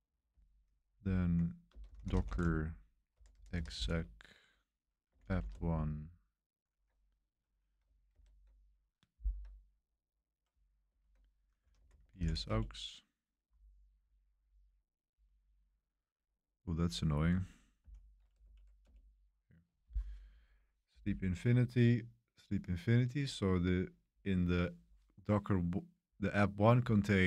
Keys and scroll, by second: 1.1-5.9 typing, 8.1 super+3, 10.8 super+1, 11.1 super+1, 11.3-12.7 typing, 17.8 ctrl+l, 18.4 Up, 18.8 Return.